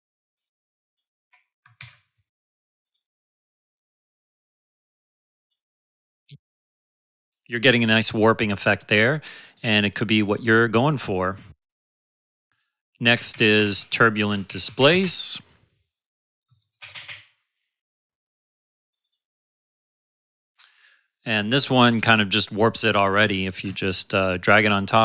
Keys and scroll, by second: 1.6 ctrl+Num_Lock, 1.8 ctrl+z, 7.8 space, 13.1-15.5 typing, 23.6 space.